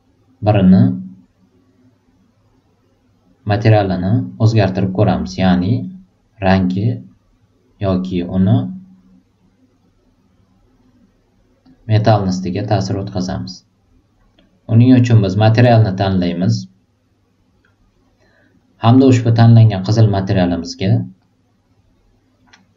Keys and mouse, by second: 7.8-10.7 drag, 11.6 click, 12.5-14.3 drag, 16.0 click, 21.1-22.7 drag.